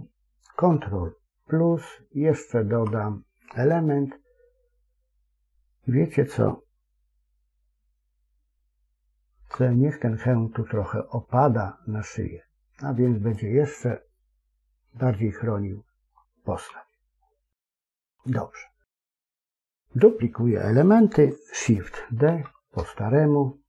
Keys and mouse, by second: 1.3 ctrl+KP_Add, 9.3 c, 14.0-16.0 middle drag, 16.6 KP_1, 17.7 KP_3, 22.2 shift+d.